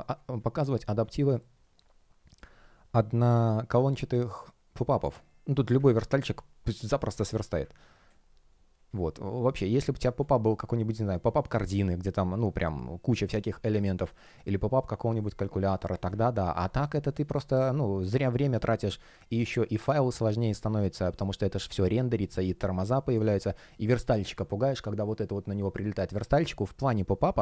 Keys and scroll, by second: 8.0 space, 15.1 space, 20.8 shift+g, 21.4 shift+o.